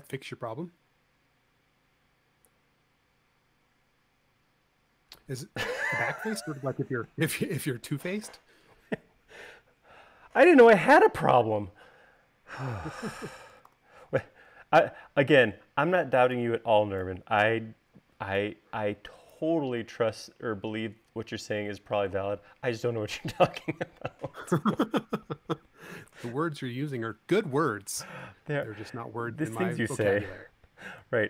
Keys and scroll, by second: 14.2 v.